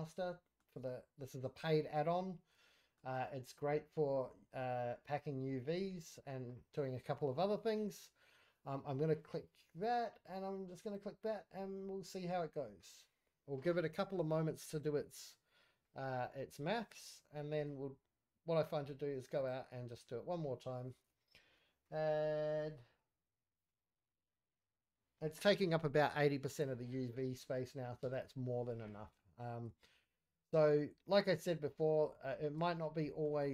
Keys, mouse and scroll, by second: 0.2-0.8 shift+middle drag, 1.1-2.0 drag, 2.2-2.6 scroll up 3, 2.6 shift+middle click, 5.1-6.1 drag, 9.2 click, 10.7-17.7 drag, 19.3-28.0 drag, 28.5-28.9 scroll up 4, 28.9 shift+middle click, 29.2 scroll down 2, 29.8 shift+middle click, 30.2-30.7 scroll up 1, 30.7-31.5 scroll down 2, 31.5 middle click, 32.0 scroll down 2, 32.2 middle click, 32.5 Tab, 32.9-33.2 middle drag, 33.3 middle click.